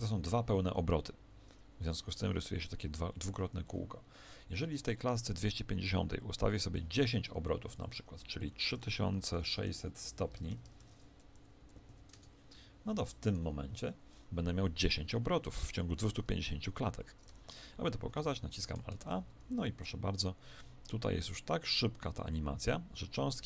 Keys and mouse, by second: 3.4 Escape, 5.8-9.5 drag, 9.5 0, 10.4 BackSpace, 10.6 BackSpace, 11.7 0, 13.3-17.2 right drag, 17.2 e, 18.1 alt+a.